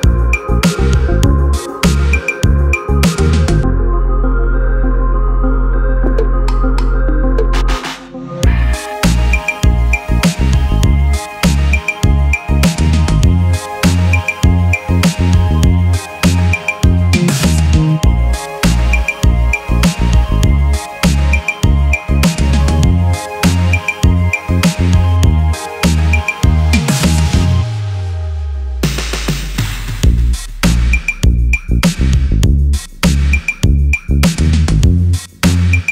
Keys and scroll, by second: 17.7-18.8 typing.